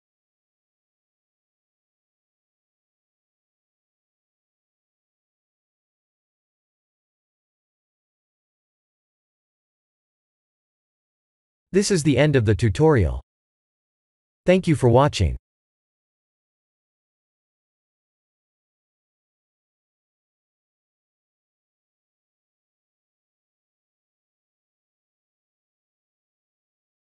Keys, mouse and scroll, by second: 3.1 click, 4.6 click, 5.9 click, 8.0 click, 8.6 ctrl+s.